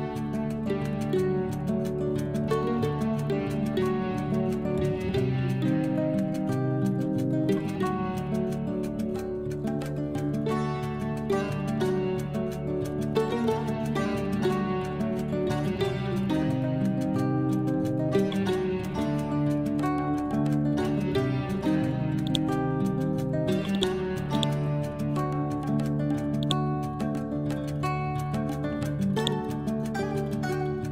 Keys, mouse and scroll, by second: 0.0-2.1 typing, 4.9 Return, 5.2-7.9 typing, 8.2 Down, 9.0 ctrl+shift+Left, 10.1 shift+Left, 13.0-17.9 typing, 18.4 scroll down 1, 21.2-21.5 scroll up 1, 22.1 click, 24.2 right click, 24.8 scroll up 1, 26.3 click, 29.1-30.8 drag, 30.6-30.9 typing.